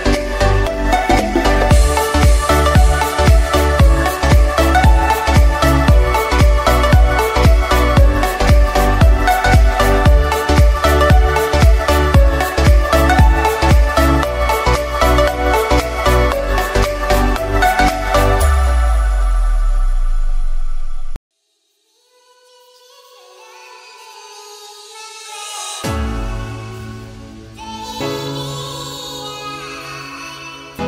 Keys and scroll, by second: 9.3 2, 9.9 Return, 13.6 2, 14.1 Return.